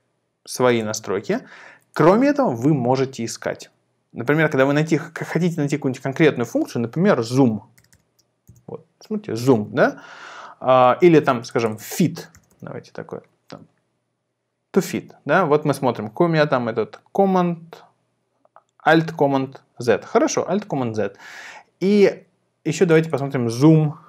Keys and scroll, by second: 7.1-8.5 typing, 12.1-12.9 typing.